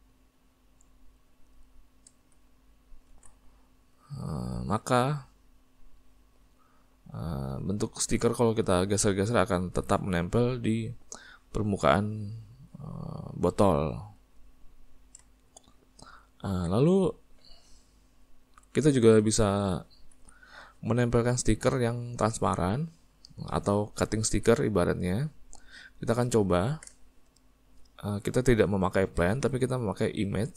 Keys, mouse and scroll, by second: 2.7 middle click, 3.3 alt+a, 3.6 middle click, 4.1 click, 4.4-5.8 middle drag, 5.8 click, 7.9-11.2 middle drag, 11.2 click, 14.3-16.6 middle drag, 16.6 alt+a, 17.4 middle click, 17.8 click, 18.3 s, 19.9 middle click, 20.3 alt+a, 21.3-30.5 middle drag.